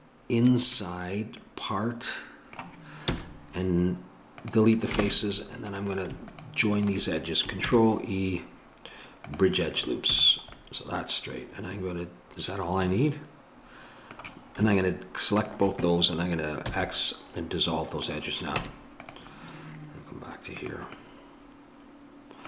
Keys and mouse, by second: 1.5-3.1 middle drag, 3.1 x, 5.0 ctrl+Tab, 6.3-8.6 drag, 7.7 ctrl+e, 10.1 a, 10.6-11.9 middle drag, 12.2 middle click, 14.7-18.6 drag, 16.7 x, 18.6 Tab.